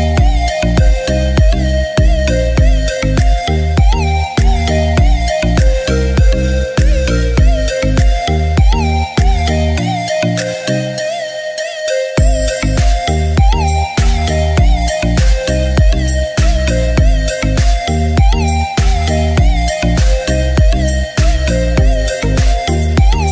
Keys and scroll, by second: 1.3 ctrl++.